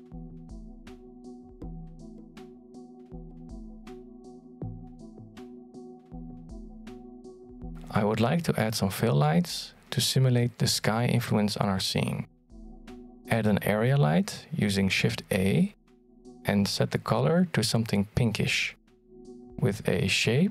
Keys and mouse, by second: 0.2 shift+middle drag, 0.5 middle click, 0.7 x, 1.0 right click, 1.1 x, 1.4 right click, 1.5-1.9 middle drag, 2.1 alt+d, 3.0 alt+d, 3.5 middle click, 4.1 g, 8.5 shift+middle click, 9.7-10.1 middle drag, 11.2 shift+c, 12.8 middle click, 13.7 shift+middle click, 14.3 shift+a, 19.3-20.5 drag.